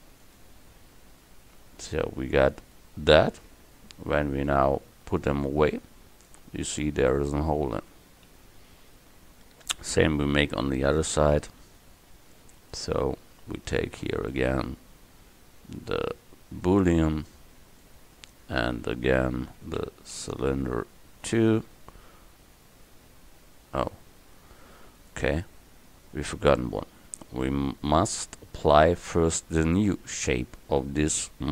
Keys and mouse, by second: 1.7 Tab, 3.6 Tab, 4.4-5.4 right drag, 8.4 KP_1, 12.6-14.3 right drag, 14.4-16.1 middle drag, 17.9-21.4 drag, 25.0-29.5 drag.